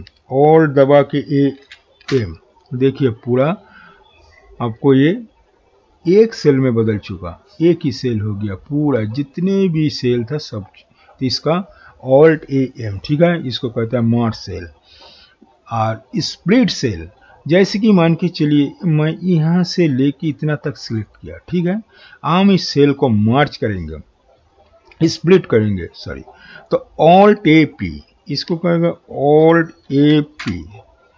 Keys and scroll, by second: 1.5 alt+a, 29.8 alt+a, 30.4 typing.